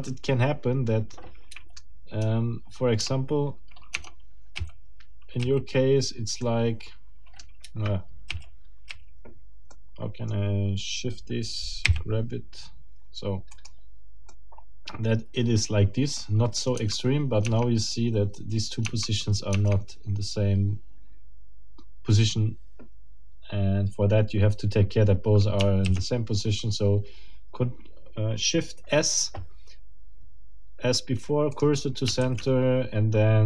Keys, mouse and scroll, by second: 0.1-2.0 right drag, 1.5 Escape, 3.0 Tab, 4.6 a, 6.4-7.6 right drag, 8.3 a, 9.7 click, 11.8 g, 13.5 middle click, 14.3-16.3 middle drag, 16.6 middle click, 16.8 Tab, 18.9 Tab, 25.9 shift+s, 31.5 middle click, 32.2 shift+s.